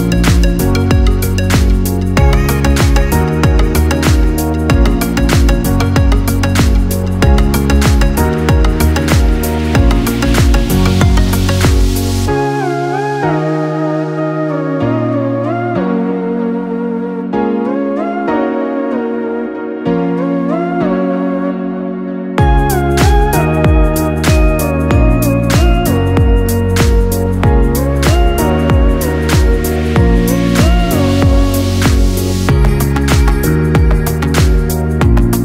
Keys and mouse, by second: 0.3 Tab, 1.7 f, 2.8 Tab, 4.1-13.6 middle drag, 13.6 click, 14.3-19.6 middle drag, 19.6 click, 21.0 shift+click, 22.5 ctrl+j, 23.8-26.8 middle drag, 27.1 ctrl+z, 28.3-34.5 middle drag, 34.5 click.